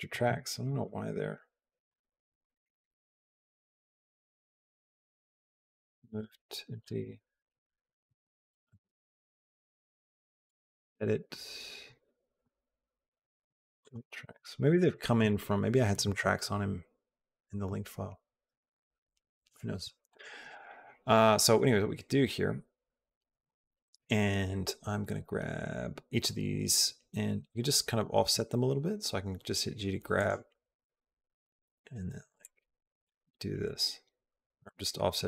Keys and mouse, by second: 0.1 x, 0.5 click, 1.7 click, 2.2 click, 2.5 click, 3.4 right click, 3.4 x, 6.7 click, 10.7 click, 14.5 click, 15.0 click, 19.9 click, 20.3 click, 28.0 g, 32.0 g, 32.9 click, 33.4 g.